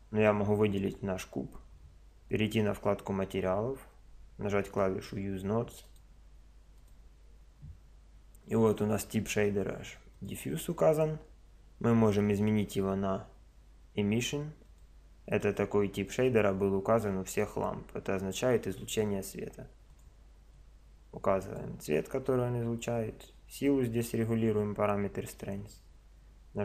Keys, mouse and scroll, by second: 2.6-8.6 drag, 10.1 click, 19.9 click.